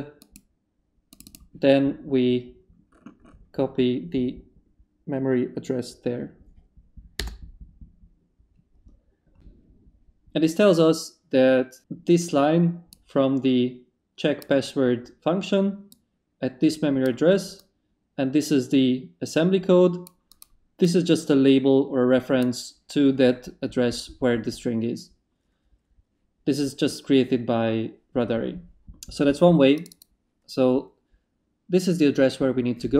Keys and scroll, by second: 7.2 Return.